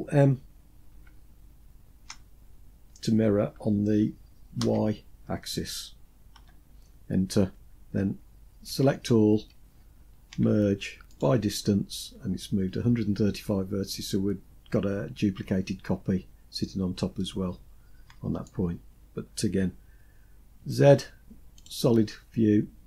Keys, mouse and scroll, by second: 0.3 ctrl+m, 8.0 a, 9.6 m, 16.0-16.5 scroll down 2, 16.5-17.8 middle drag, 19.9 z.